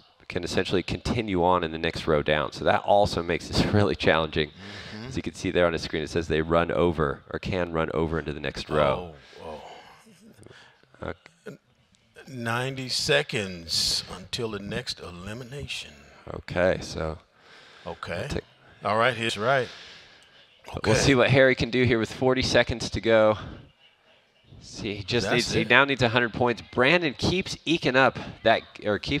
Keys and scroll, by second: 19.2 Return, 19.3 shift+0, 19.5 Return, 19.9 Return, 20.1 0, 20.4 Return.